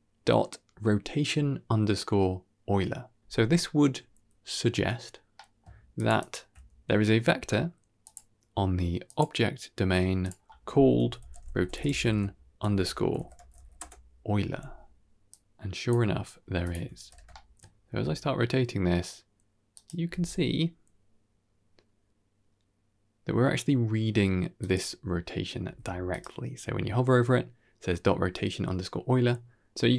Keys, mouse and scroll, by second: 5.2 middle click, 5.9 ctrl+shift+click, 6.1 ctrl+shift+click, 6.8-7.2 middle drag, 7.9-9.1 drag, 10.1-13.7 drag, 11.4 t, 15.2-15.8 drag, 16.5 click, 16.8 alt+r, 17.2 shift+middle drag, 17.8 r, 19.9 r, 25.5 r.